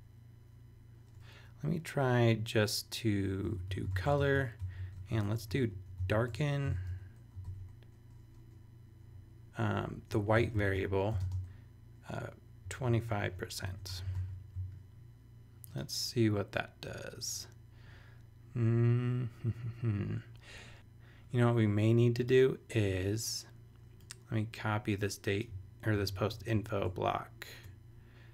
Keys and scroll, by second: 3.2-7.4 typing, 9.8-14.4 typing, 25.9 super+c, 26.3 super+BackSpace, 27.5 BackSpace.